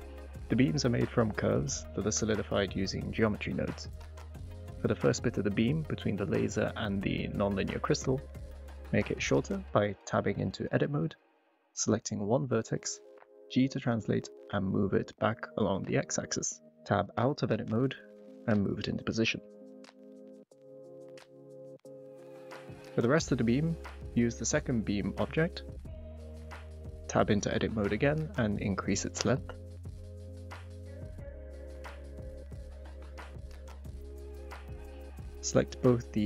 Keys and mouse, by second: 1.2 Tab, 2.1 click, 4.2 Tab, 6.1 shift+click, 10.3 Tab, 11.7 s, 13.0 g, 13.3 x, 15.0 click, 15.3 Tab, 19.3-19.6 middle drag, 20.5 g, 20.7 x, 21.6 click, 21.8 click, 22.1 g, 22.3 z, 23.4-23.7 middle drag, 24.9 click, 26.7 g, 26.9 x, 30.1 g, 30.3 x, 32.1 shift+middle click, 32.6 g, 32.8 x, 33.6 click, 34.4 middle click.